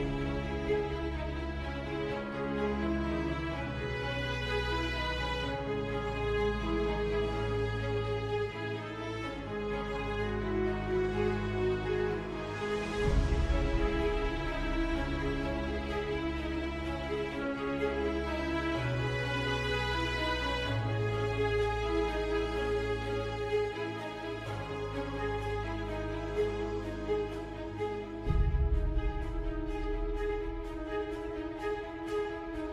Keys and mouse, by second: 8.1 3, 8.4 click, 9.2 middle click, 10.0 middle click, 11.0 shift+click, 12.2 KP_7, 12.7 z, 15.9 z, 16.4 middle click, 18.0 middle click, 18.8 i, 21.1 s, 26.6 KP_7, 27.1 z, 28.6 alt+e.